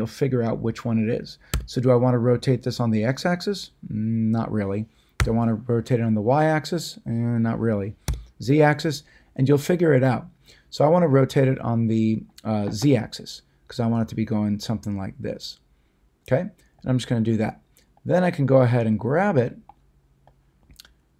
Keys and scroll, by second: 1.5 x, 5.2 y, 8.0 z.